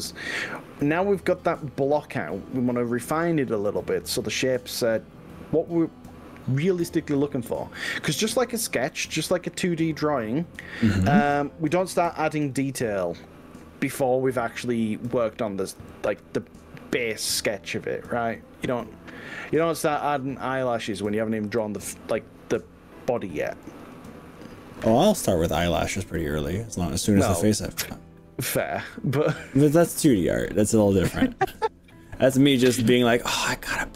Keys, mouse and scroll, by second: 8.7 click, 10.3 click, 12.1 click, 13.1 click, 13.7 click, 14.7 click, 15.8 g, 19.4 click, 20.1 click, 21.5 g, 23.3 click.